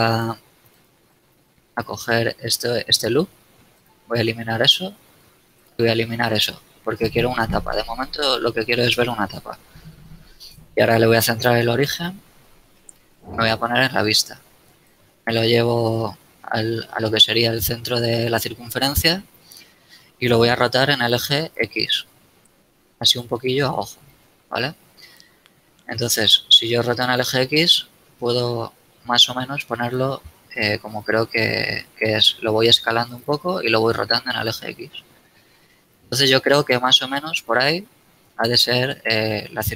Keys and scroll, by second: 2.8 x, 5.5 x, 10.2 ctrl+alt+shift+c, 13.5 KP_1, 20.8 r, 21.5 x, 23.8 z, 25.5 r, 26.8 x, 30.8 s, 33.8 r, 34.2 x, 37.2 z, 38.9 z.